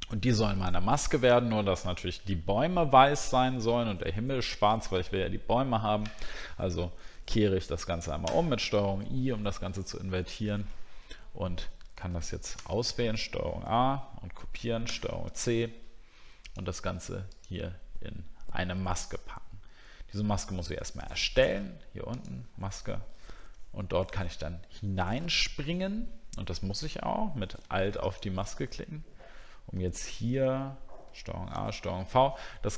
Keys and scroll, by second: 31.5 ctrl+v.